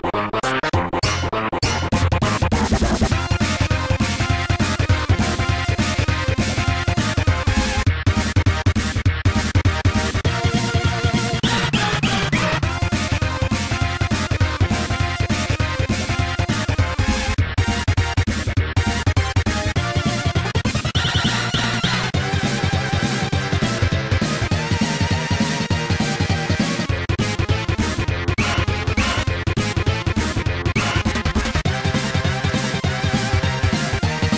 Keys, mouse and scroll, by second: 0.3 click, 0.6 ctrl+z, 0.9 right click, 1.2 g, 3.0-3.5 scroll down 2, 6.7 click, 9.1 right click, 10.7 click, 10.8 click, 11.2 click, 11.3 click, 11.7 g, 17.8 click, 17.9 click, 18.1 ctrl+z, 21.0 click, 22.7 click, 23.3 ctrl+a, 25.5-26.2 scroll up 2, 26.6-27.2 scroll up 2, 29.5-30.1 scroll up 2, 30.4-31.0 scroll down 2, 33.0-33.6 scroll down 2.